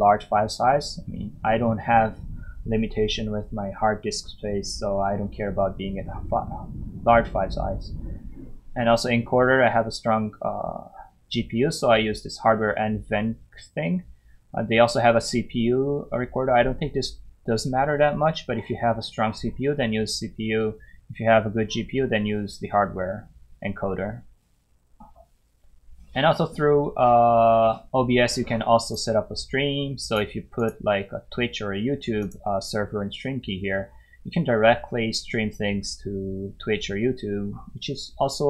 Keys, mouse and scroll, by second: 25.1-26.4 scroll down 1, 28.8 click.